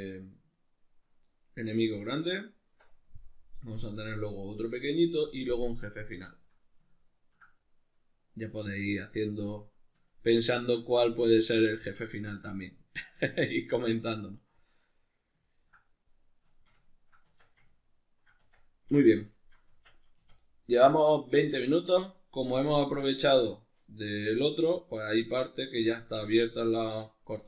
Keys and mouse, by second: 17.3 Tab, 17.4-18.5 middle drag, 18.5 Tab, 19.0 ctrl+middle click, 19.7 Tab, 19.7-27.4 middle drag, 20.2 a.